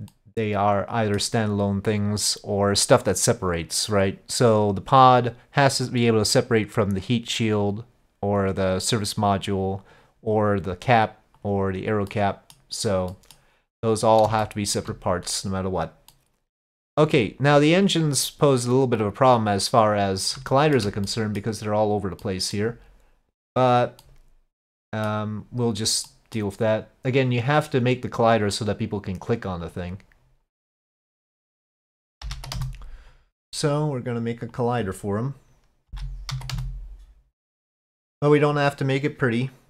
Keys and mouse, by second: 0.1-1.2 middle drag, 5.1-8.5 drag, 11.4 click, 12.1-12.6 middle drag, 13.1 middle click, 14.4-14.8 shift+middle drag, 16.1-17.0 middle drag, 19.8 click, 20.6 shift+middle drag, 21.1-21.4 middle drag, 22.2 middle click, 24.0-25.1 middle drag, 26.1 middle drag, 27.5-29.8 drag, 31.4-33.4 drag, 34.5-37.3 drag, 37.6-39.6 drag.